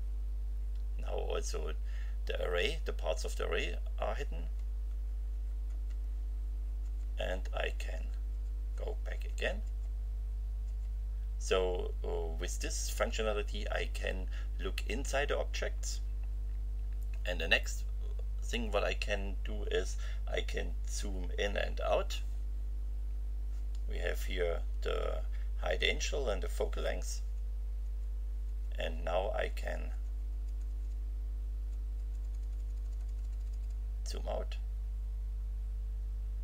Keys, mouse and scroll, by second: 4.4 F5, 6.8 F6, 10.6 F6, 27.2 F9.